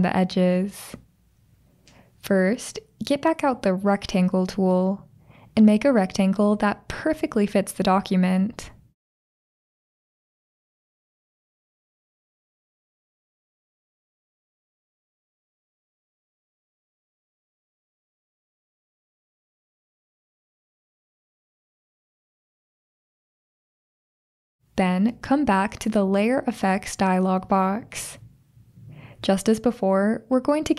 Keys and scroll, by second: 22.7 super+o.